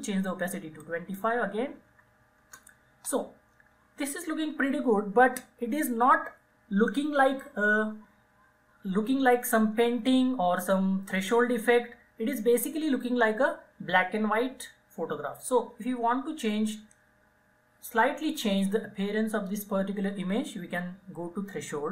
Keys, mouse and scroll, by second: 0.9 click, 1.6 typing, 2.5 Return.